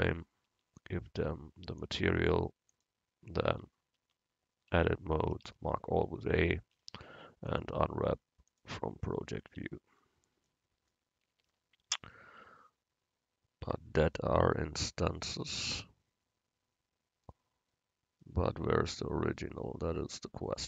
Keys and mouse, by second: 0.0 Tab, 0.6 Tab, 2.7 click, 3.6 Tab, 4.1 Tab, 4.8 Tab, 5.3 a, 5.5 a, 6.8 u, 9.6 Tab.